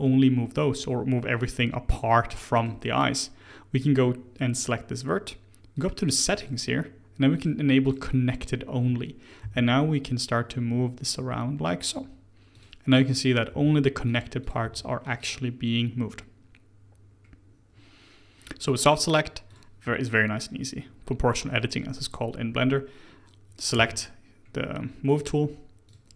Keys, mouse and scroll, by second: 2.5 click, 5.7 click, 6.0 click, 6.3-9.4 drag, 9.4 g, 13.1 click, 13.4 g, 14.4 click, 14.6 g, 17.0-18.4 scroll down 1, 18.4-19.4 middle drag, 19.4 click, 22.6-23.7 scroll up 1, 23.7 g.